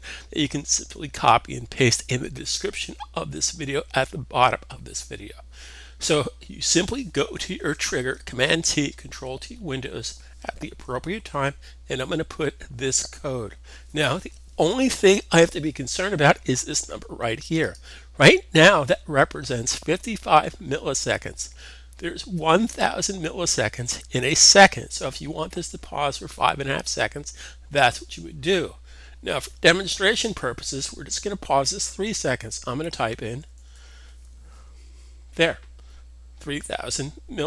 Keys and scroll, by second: 32.8-33.6 typing.